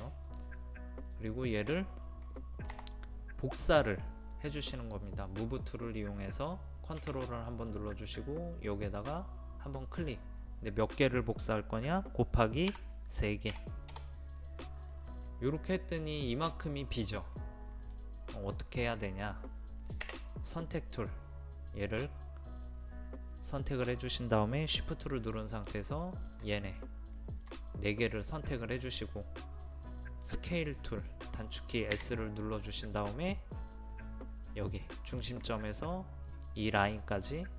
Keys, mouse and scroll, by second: 0.3 click, 2.7 m, 7.5 click, 13.5 KP_3, 14.9-19.7 middle drag, 20.7 space, 25.3 shift+click, 25.7 shift+click, 26.1 shift+click, 26.6 shift+click, 27.2-30.7 shift+middle drag, 31.4-32.0 scroll up 1, 35.2 scroll up 1, 35.2 click.